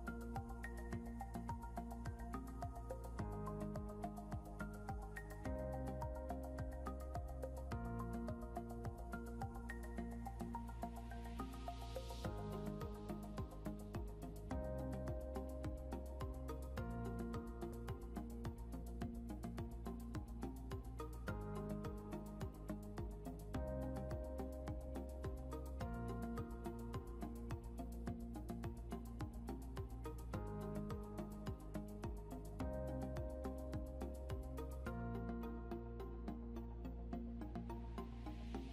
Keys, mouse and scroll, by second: 0.3-1.6 typing, 3.2-15.7 typing, 22.6 right click, 27.4 right click, 38.0 double click.